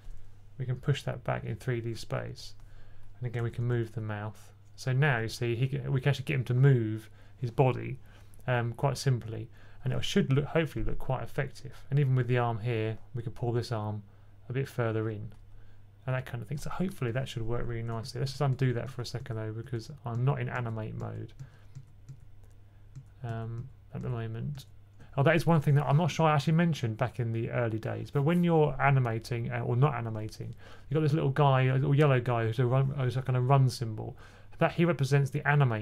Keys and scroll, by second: 3.3 alt+shift+b, 3.5 alt+shift+b, 4.6-5.4 typing, 7.3-8.0 typing, 17.9 super+z, 18.1 super+z, 18.4 super+z, 18.7 super+z, 19.1-24.5 typing, 19.5 super+z.